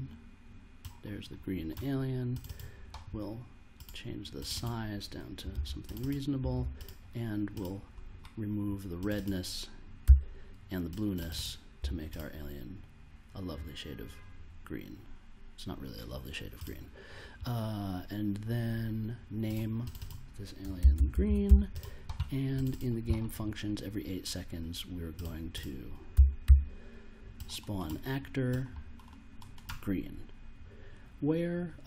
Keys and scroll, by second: 5.1-7.0 typing, 10.0 0, 11.7 0, 20.5-22.0 typing, 26.1 s, 26.4 p.